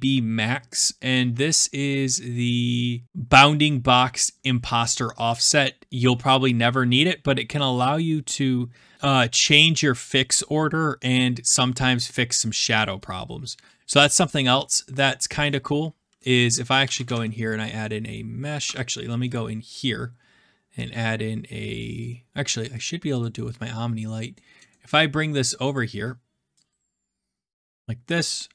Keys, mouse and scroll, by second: 12.9-13.5 scroll, 14.0 scroll down 5, 14.1 scroll, 14.2 scroll down 1, 15.2 right click, 15.3 click, 16.3 click, 16.5-17.6 typing, 18.6 Escape, 19.8 click, 20.8 click, 22.8-24.7 drag, 25.2-26.3 middle drag, 25.2-26.3 scroll up 1, 26.3-27.1 scroll, 27.5 click.